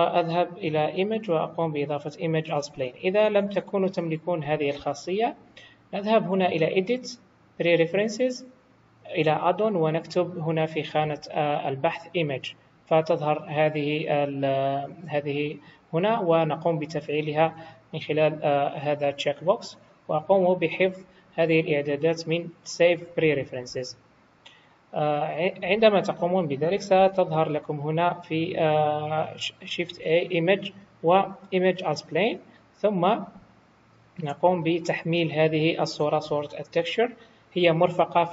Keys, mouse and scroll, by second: 6.4 click, 26.9 shift+a.